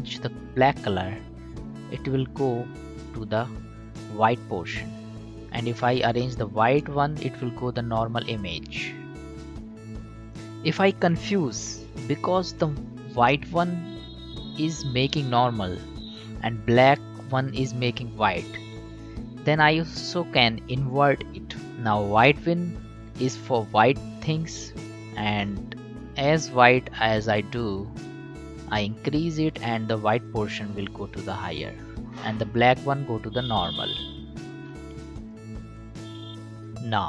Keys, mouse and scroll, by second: 6.7-10.9 drag, 14.9-21.3 drag, 21.6 click, 24.7-33.0 drag, 33.0-36.3 drag.